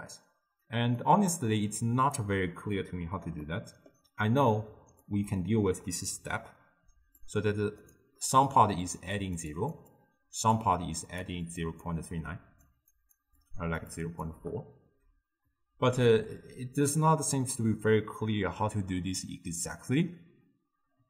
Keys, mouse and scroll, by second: 1.1-5.1 middle drag, 5.1-7.9 drag, 8.9-14.5 typing, 9.2 click, 9.6 click, 9.9-10.6 drag, 11.3 click, 11.6 click, 12.2 click, 13.0 click, 13.5 click, 14.0 click.